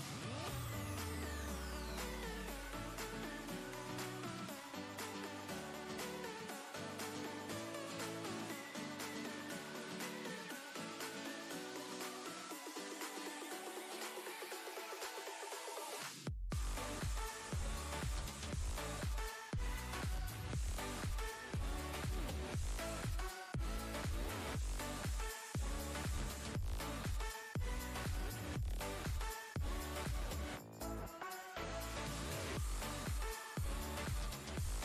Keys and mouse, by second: 1.8 right click, 3.9 click, 4.8 alt+Tab, 6.4 ctrl+v, 7.2 ctrl+space, 7.3-7.9 ctrl+click, 7.7 ctrl+space, 8.2-9.1 drag, 12.8 right click, 14.2 click, 18.5-21.0 drag, 19.5-19.8 click, 21.0 ctrl+g, 22.6 click, 33.2 click.